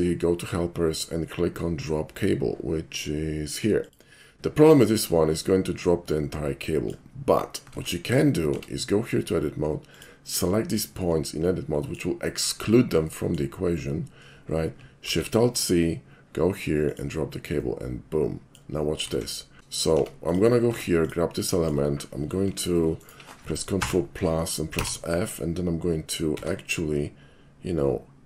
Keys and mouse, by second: 0.3 alt+shift+c, 3.8 click, 4.7-6.9 middle drag, 7.8 ctrl+z, 8.5 Tab, 9.9 click, 10.8 shift+click, 11.8 shift+middle click, 13.1 shift+middle click, 15.1 alt+shift+c, 16.9 click, 17.7-18.6 middle drag, 19.2 ctrl+z, 19.6 Tab, 20.3 click, 21.0 click, 21.4 middle click, 22.5 i, 22.9 right click, 23.8 ctrl+KP_Add, 24.8 f, 26.5 e.